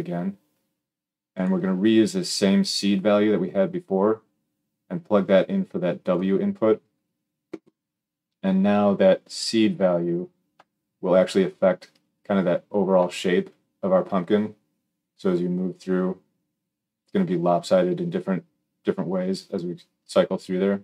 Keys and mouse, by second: 2.9-20.8 drag.